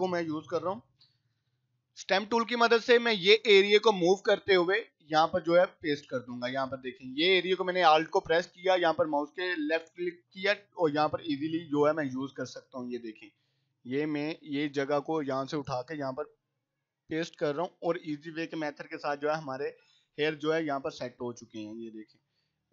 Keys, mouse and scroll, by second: 2.0 [, 2.2 [, 2.3 [, 2.5 [, 3.9 alt+click, 4.9-6.5 drag, 11.0-12.3 drag, 12.8-14.9 drag, 16.5-17.7 drag, 17.7 scroll down 2, 19.9 scroll up 1, 21.1 alt+click, 21.6-22.2 drag.